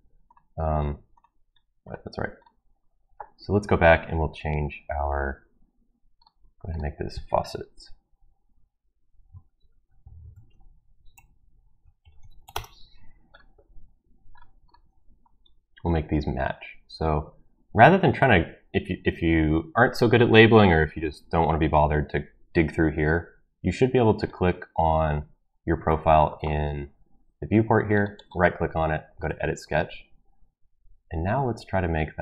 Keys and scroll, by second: 10.1-12.9 typing.